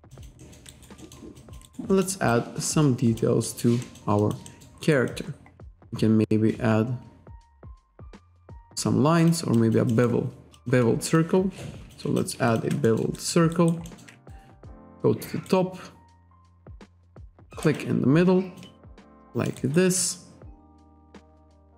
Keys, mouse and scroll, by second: 0.2 alt+click, 0.5 alt+middle click, 1.4 alt+click, 1.7 alt+right click, 2.4 alt+click, 3.5 alt+middle click, 3.9 alt+middle click, 4.3 alt+click, 4.5-4.9 alt+scroll up 2, 4.5 alt+middle click, 4.9 alt+right click, 5.2 alt+click, 5.7 scroll down 1, 6.8-7.6 scroll up 1, 9.2 click, 9.6 alt+click, 10.0 alt+scroll up 1, 10.6 alt+click, 11.2 click, 12.2 alt+click, 12.5 alt+shift+click, 12.9 alt+middle click, 13.2 alt+right click, 13.5 alt+right click, 13.9 alt+middle click, 14.3 ctrl+right click, 17.0 click, 17.5 alt+right click, 19.1 alt+click, 19.6 alt+right click, 20.0 alt+click, 21.6 shift+right click.